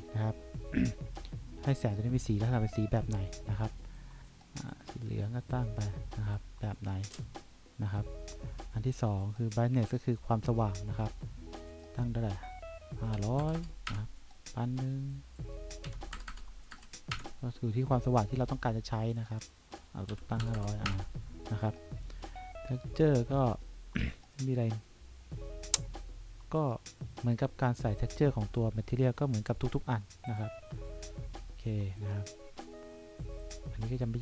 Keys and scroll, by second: 13.1-14.1 typing, 16.0 1, 16.3 0, 17.3 Return, 20.3 5, 20.6 0, 21.0 Return.